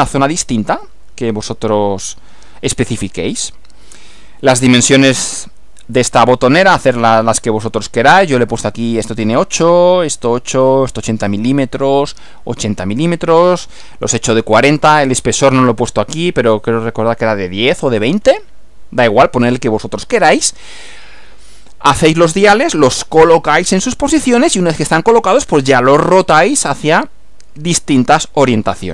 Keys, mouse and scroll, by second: 4.5 Right.